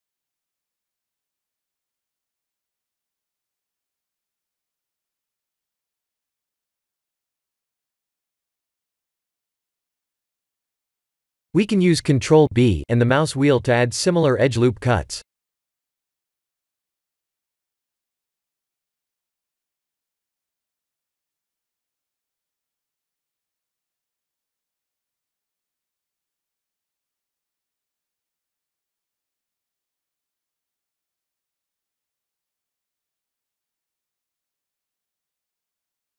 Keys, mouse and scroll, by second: 0.0 Tab, 0.6 ctrl+r, 2.3 ctrl+r, 5.6 alt+click, 6.3 ctrl+b, 7.6 Tab, 9.2 Tab, 9.8 scroll up 3, 10.7 ctrl+z, 11.1 ctrl+z, 12.4 ctrl+b, 14.3 right click, 15.1 Tab, 16.7 shift+middle click, 17.5 Tab, 18.4 alt+click, 18.9 ctrl+b, 20.2 Tab, 21.1 Tab, 22.0 alt+click, 22.6 ctrl+b, 23.5 Tab, 24.9 scroll up 2, 25.7 middle click, 26.2 middle click, 26.5 Tab, 27.6 alt+click, 28.1 ctrl+b, 30.3 Tab, 31.1 Tab, 32.2 alt+click, 32.7 ctrl+b, 34.7 Tab, 35.5-36.1 scroll down 7.